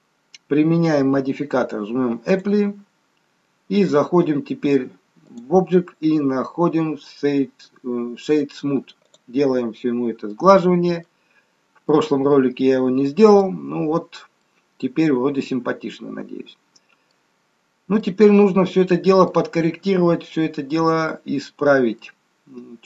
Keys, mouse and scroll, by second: 2.2 click, 9.9-10.2 scroll up 3, 10.2 middle click, 11.3-11.9 scroll up 1, 11.9 middle click, 11.9-12.4 scroll up 1, 14.0-14.4 scroll down 2, 14.4 middle click, 17.7 scroll up 1, 18.0 middle click, 20.8-21.8 scroll up 2, 21.9 middle click.